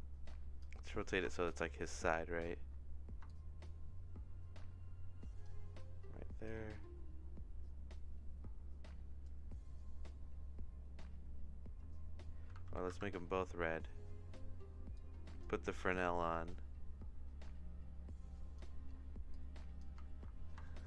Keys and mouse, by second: 1.3 shift+middle click, 3.2-5.4 shift+drag, 6.5-9.2 drag, 12.6 ctrl+c, 12.9 ctrl+v, 14.9 click, 15.9-18.6 shift+drag, 19.3 click, 20.2 ctrl+z, 20.6-20.8 shift+middle drag.